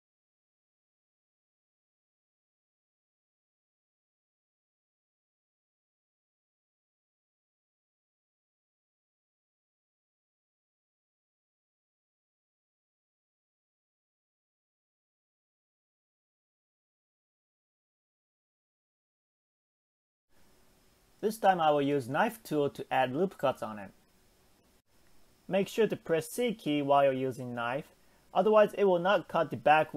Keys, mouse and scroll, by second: 0.1 shift+middle click, 0.5 click, 1.4 shift+middle click, 2.1 shift+click, 2.8 g, 7.2-7.6 scroll down 2, 7.6 shift+middle click, 8.1-8.9 scroll up 5, 8.9-10.1 scroll down 5, 10.1 shift+middle click, 10.6-11.1 scroll up 1, 11.1 click, 11.5 g, 14.1-15.1 scroll down 4, 15.1 Tab, 15.4 scroll down 4, 15.7-16.5 middle drag, 16.5 scroll down 1, 16.7-17.9 shift+middle drag.